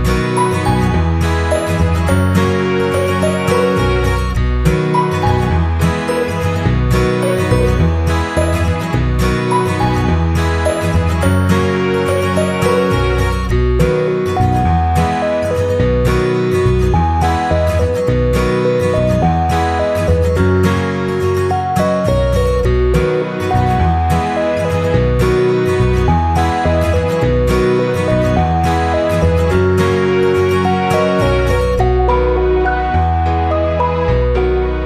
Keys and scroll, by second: 19.3 ctrl+c, 19.6 ctrl+v, 23.6-25.7 typing.